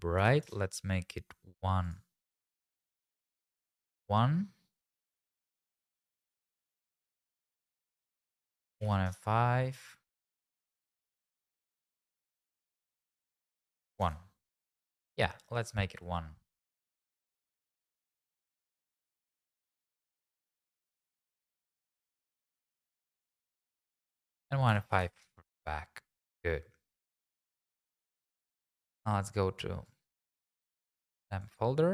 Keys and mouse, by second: 3.1 click, 7.9-9.1 drag, 9.9 middle click, 10.7 KP_0, 12.8-14.0 drag, 18.8 click, 19.4 g, 19.5 x, 21.2 right click, 22.4 click, 24.2-25.3 drag, 28.4 click.